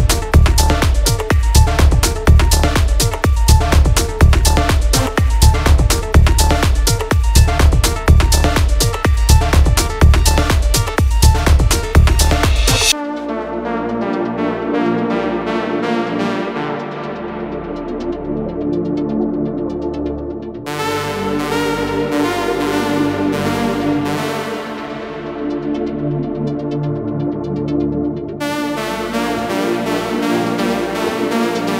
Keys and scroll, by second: 2.9 ctrl+-, 3.0 ctrl+-, 5.0 ctrl+-, 7.2 ctrl+space, 9.3 space, 9.5 space, 11.3 ctrl+space, 13.5 ctrl+t, 19.2 ctrl+t, 23.4 space, 24.0 space, 25.7 ctrl+space, 26.5 ctrl+-, 26.8 ctrl+-, 26.9-27.7 space.